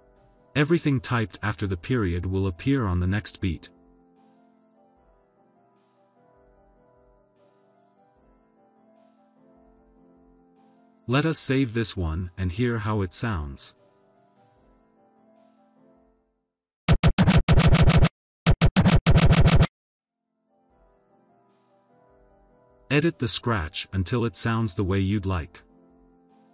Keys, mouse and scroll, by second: 1.0 ., 5.8 click, 7.4-9.8 typing, 13.3 click, 15.0 click, 16.8 click, 18.4 click, 21.2 click, 21.6 click, 22.0-26.5 typing, 23.1 click.